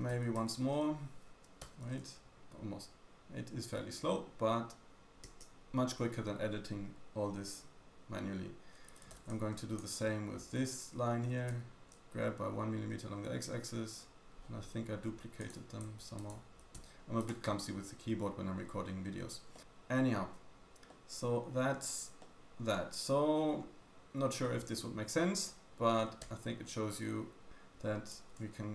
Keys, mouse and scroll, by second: 1.3 g, 3.1 g, 8.9 a, 9.0-16.2 drag, 9.0 a, 9.1 b, 11.3 g, 15.4 middle click, 15.4 right click, 16.2 shift+middle click, 16.3 shift+click, 16.8 x, 19.5 middle click, 20.6 Tab, 20.6 click, 20.9 middle click, 21.7-22.2 scroll down 1, 22.2 middle click, 25.4-25.9 scroll up 2, 25.9-27.5 scroll down 2, 27.5 Tab, 28.1 a.